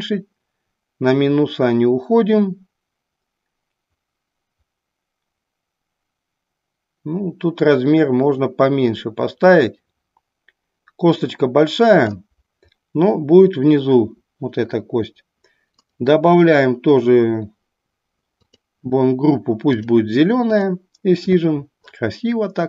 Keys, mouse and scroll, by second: 15.8 click, 18.4-20.0 drag, 20.7 click.